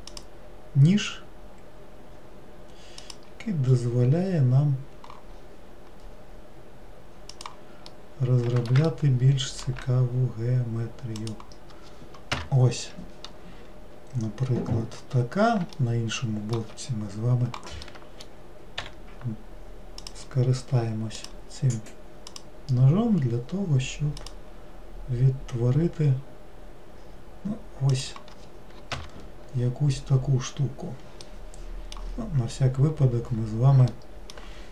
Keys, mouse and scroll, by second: 5.4-7.9 scroll up 2, 7.9-12.1 middle drag, 14.6-15.2 scroll up 5, 15.9-18.9 shift+middle drag, 18.9 k, 30.1 scroll down 2, 31.3-32.5 middle drag, 32.5 scroll down 2, 34.0-34.7 middle drag.